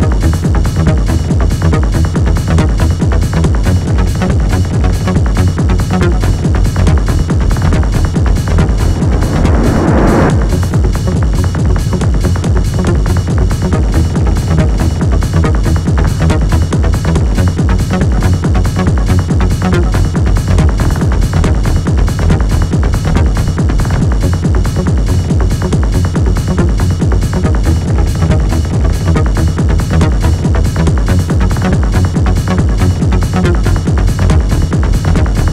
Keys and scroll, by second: 2.8 shift+k, 3.2 Return, 6.1 p, 7.0 p, 9.0 3, 15.7 F1, 17.6 Delete, 18.7 1, 22.0 F1, 23.6 Delete, 25.9 ctrl+d, 26.0 Escape, 32.4 F1, 33.5 ctrl+d, 34.8 9, 35.0 Return.